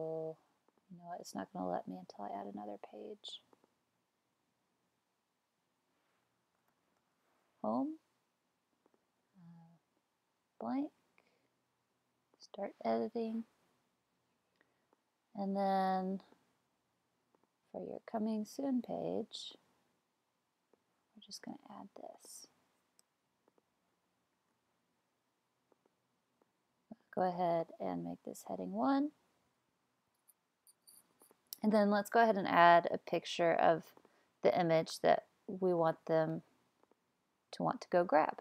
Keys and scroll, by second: 6.4-7.6 typing, 21.3 super+c, 24.4 super+v.